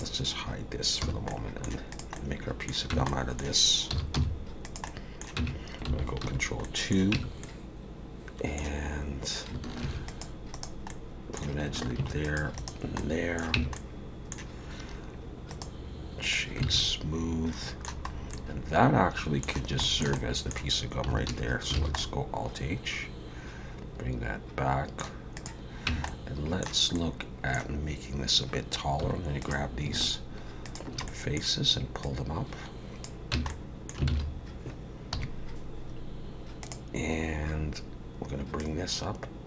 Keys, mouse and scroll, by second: 1.0 h, 1.3 middle click, 1.9 click, 2.2 middle click, 2.9 Tab, 3.1 middle click, 3.9 s, 4.9 middle click, 5.4 Tab, 6.2 ctrl+2, 6.6 middle click, 7.1 Tab, 7.4 middle click, 9.8 ctrl+r, 10.9 middle click, 12.0 ctrl+r, 13.0 middle click, 13.6 Tab, 13.7 middle click, 15.5 right click, 16.6 alt+a, 16.8 middle click, 18.1 scroll up 1, 18.3 middle click, 19.8 shift+middle click, 20.1 middle click, 21.3 alt+h, 21.8 alt+a, 22.0 middle click, 25.3 click, 25.9 Tab, 26.1 middle click, 26.9 middle click, 29.0 3, 29.4 click, 30.0 shift+click, 30.6 click, 31.1 middle click, 32.0 click, 33.3 Tab, 33.5 middle click, 34.1 alt+a, 35.1 KP_3, 37.1 click, 38.6 click.